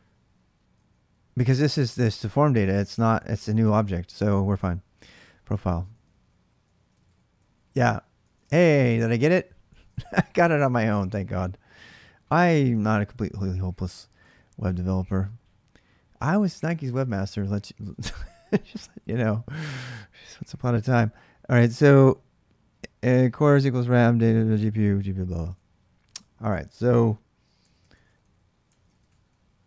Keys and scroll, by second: 0.5-2.9 typing, 5.1-9.8 typing, 9.5 ctrl+[, 9.9 Return, 10.8 alt+Tab, 13.6-14.5 typing, 18.2-20.5 typing, 25.2 alt+Tab, 27.4-29.6 typing.